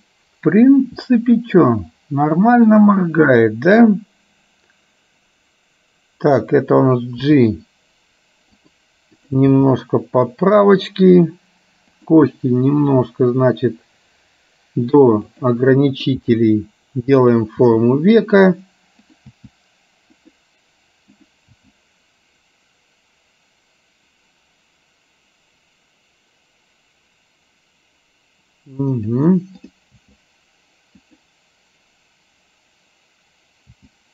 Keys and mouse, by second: 2.7 click, 7.3 g, 9.2 click, 9.8 g, 12.0 click, 13.0 g, 16.0 click, 17.7 g, 19.1 click, 21.2 click, 21.8 g, 29.7 click, 30.3 g, 33.8 g.